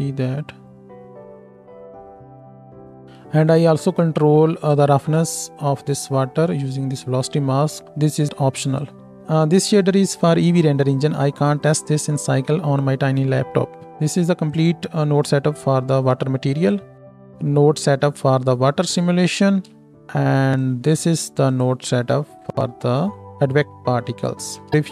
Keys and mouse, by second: 3.2-14.5 drag, 3.2-9.2 middle drag, 3.2-9.2 right drag, 9.5-11.7 middle drag, 9.5-11.7 right drag, 14.5-17.0 middle drag, 17.0 ctrl+space, 17.0-20.6 drag, 21.6-24.7 drag, 22.1 ctrl+space, 24.7 middle click.